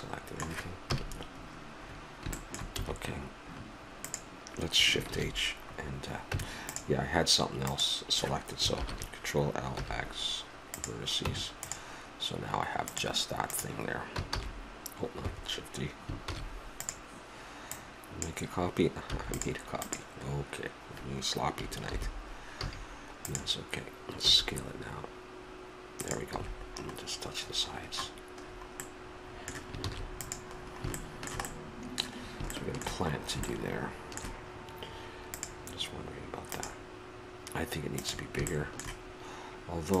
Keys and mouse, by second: 0.9 KP_Decimal, 2.8 a, 4.0-5.1 drag, 5.1 shift+h, 6.3 Tab, 7.6-8.7 drag, 8.7 ctrl+l, 9.8 x, 11.2 Tab, 14.3 shift+d, 17.7-19.6 drag, 19.0 x, 19.8-21.7 drag, 21.9 alt+h, 22.6 a, 23.2-25.1 drag, 26.4 s, 26.4 a, 26.6-28.0 middle drag, 29.8 ctrl+s, 33.0 middle click, 35.3-36.6 drag, 38.5-40.0 middle drag.